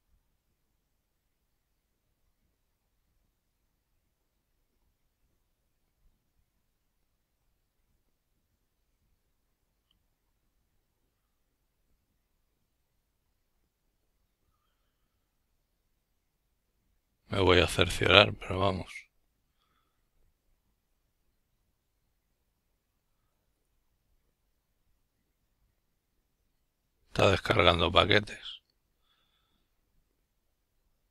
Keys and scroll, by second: 17.7-27.0 typing, 27.2 Return, 29.1 s, 29.5 Return, 30.8 s.